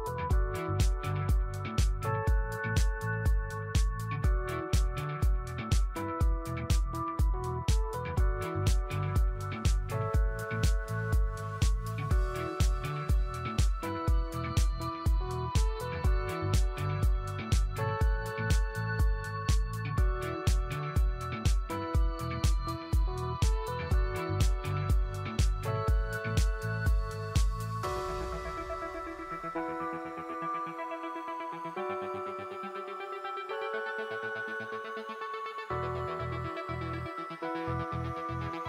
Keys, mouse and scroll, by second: 1.6 click, 2.1 Home, 2.7 Delete, 3.6 scroll up 1, 3.8 click, 4.3 scroll up 1, 4.8 alt+click, 7.0 Tab, 7.3 click, 7.5 Home, 7.5 Tab, 13.7 Delete, 14.6 scroll down 1, 14.9 alt+click, 15.3 scroll up 1, 15.7 alt+middle click, 15.7-16.5 typing, 16.3 scroll up 1, 16.5 alt+click, 16.8 scroll up 1, 17.2 alt+click, 18.2 scroll down 1, 18.6 alt+click, 22.6 right click, 25.3 click, 25.9 click, 26.4 shift+click, 26.8 shift+click, 27.6 alt+click, 27.7-28.4 typing, 30.0-31.0 scroll down 1, 31.0 space, 31.2 click, 31.5 space, 33.8 click, 35.3-35.6 scroll up 1, 35.8 alt+middle click, 36.3-36.6 scroll up 1, 37.0 click.